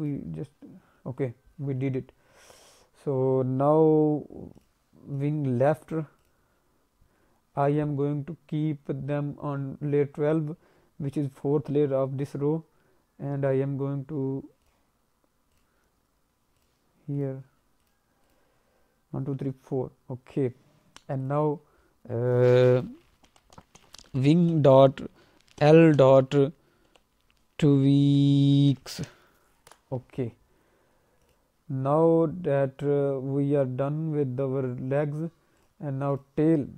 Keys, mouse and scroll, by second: 4.5 click, 5.1 click, 6.2 click, 14.6 click, 15.5 click, 16.6 click, 17.1 click, 17.8 click, 18.2 click, 21.2 click, 31.2 click, 35.6 click, 36.1 click, 36.6-36.7 scroll down 1.